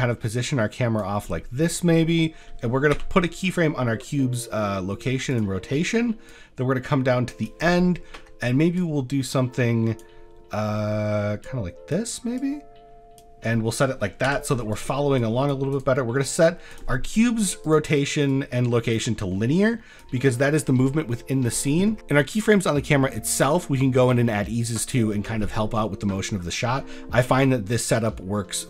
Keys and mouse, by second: 1.2 middle drag, 1.8 shift+middle click, 6.3-7.5 drag, 8.0 middle drag, 8.8 click, 10.8 middle drag, 11.4 click, 12.4 click, 13.6 middle click, 15.2 click, 15.4 drag, 15.7-16.8 drag, 17.7 click, 18.3-20.0 drag, 27.1 middle drag.